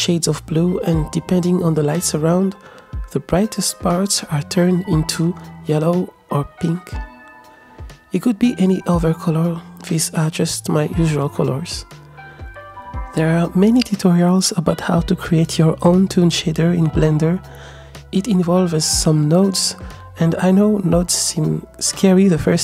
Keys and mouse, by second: 2.8 g, 5.3 space, 5.4 g, 11.7 click, 13.0-16.8 drag, 17.2 ctrl+z, 18.0 Tab, 19.2 drag.